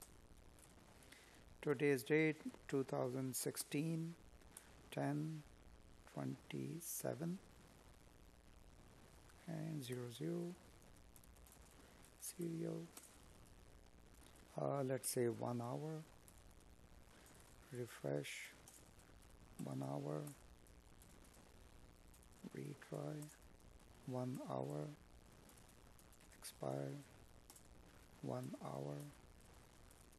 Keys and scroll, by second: 7.5 space, 7.9 space, 9.7 Tab, 12.3 Tab, 13.1 space, 15.4 Tab, 16.4 space, 17.0 Tab, 17.8 space, 20.0 Tab, 21.3 Tab, 22.2 space, 24.2 Tab, 25.2 space, 25.7 Tab, 26.6 space.